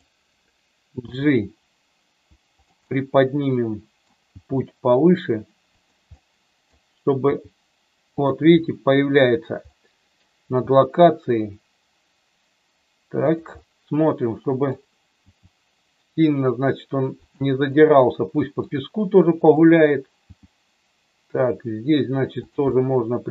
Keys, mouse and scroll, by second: 1.0 g, 2.5 click, 2.9-4.0 middle drag, 4.2 g, 5.6 click, 6.0 middle click, 7.3 g, 9.7 middle click, 10.5 g, 13.3 click, 13.6-14.7 middle drag, 15.1 g, 17.2 click, 17.6 middle click, 19.5 click, 20.2 g, 22.8 middle click.